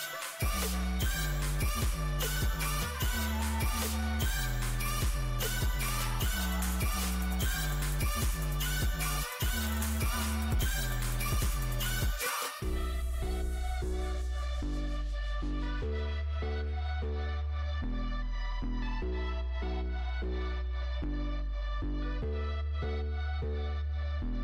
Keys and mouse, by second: 0.7 e, 4.1 z, 8.3-12.9 right drag, 12.9 z, 14.1 w, 21.8 click, 22.5-24.4 middle drag, 23.5 click, 23.5 right click.